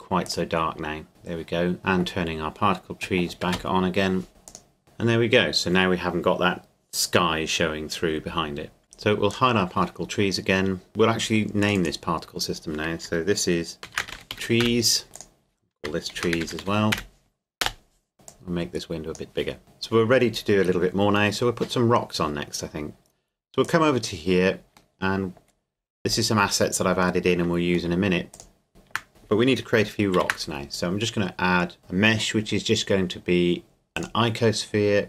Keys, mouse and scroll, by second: 0.2 click, 1.8 right click, 3.5 Escape, 4.5 click, 9.3-13.0 drag, 13.8-14.6 typing, 15.0 click, 16.1-16.9 typing, 17.6 Return, 18.2-20.2 drag, 23.6 click, 25.0 middle click, 25.4 scroll down 1, 25.9 scroll up 1, 28.0 middle click, 28.3 click, 28.7 shift+middle click, 29.1-29.8 scroll up 1, 30.2 shift+a, 33.9 click.